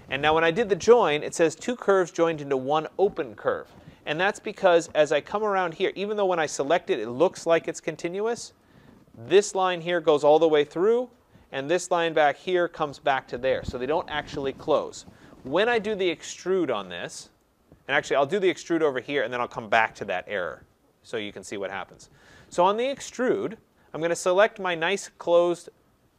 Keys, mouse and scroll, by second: 0.2 typing, 4.1 click, 6.0 click, 8.6 click, 17.4 right click, 17.6-18.5 scroll, 18.5 right click, 18.5-20.6 scroll, 20.6-20.9 scroll, 21.0-21.9 scroll up 1, 21.9 scroll up 4, 22.1-22.7 scroll, 23.3 click, 25.4 scroll, 25.7 scroll down 2.